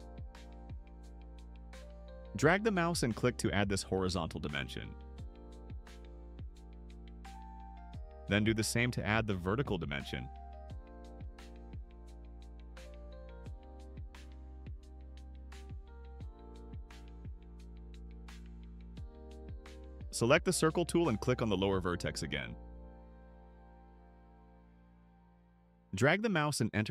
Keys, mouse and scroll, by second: 1.8 click, 4.7 click, 5.6-7.6 typing, 10.0 click, 11.5 click, 12.7 8, 14.1 ,, 14.7 1, 15.4 Return, 23.1 click, 23.8 middle click, 24.0 middle click, 25.5 click.